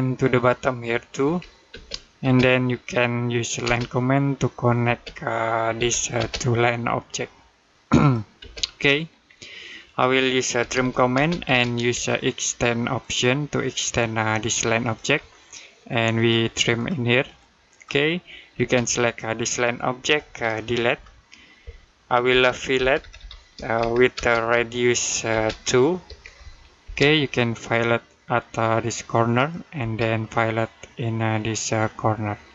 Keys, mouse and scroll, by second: 1.1-1.5 typing, 5.6 l, 6.0 space, 6.8 click, 8.2 space, 8.7 middle click, 9.1-9.6 scroll up 1, 9.6 middle click, 10.2-11.1 typing, 12.8 shift+click, 14.6 shift+click, 16.0 click, 18.4 space, 18.9 click, 20.7 Delete, 24.0-26.6 typing, 28.2 click, 29.6 space, 31.5 click.